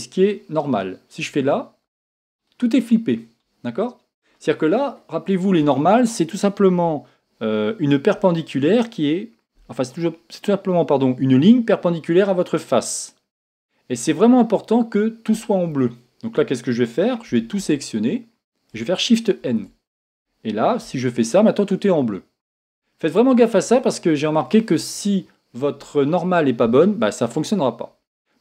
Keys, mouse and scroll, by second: 1.4 click, 2.4-17.6 middle drag, 19.5 shift+n, 20.1-20.8 scroll down 2, 20.2-28.4 middle drag, 20.8 scroll down 1, 20.9 a.